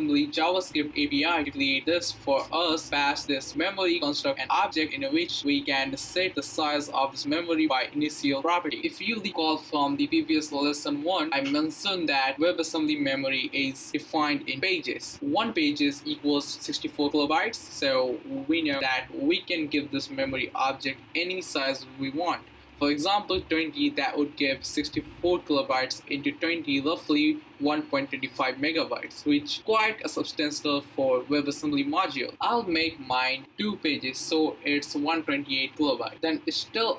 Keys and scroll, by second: 7.5-9.1 typing, 32.9 2, 33.5 space.